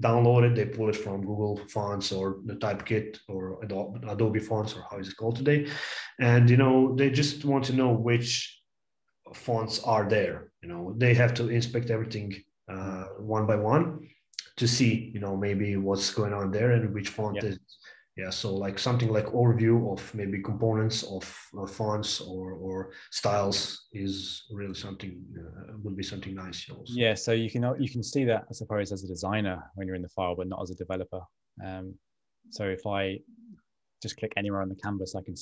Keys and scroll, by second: 29.6 super+Tab, 30.9 a.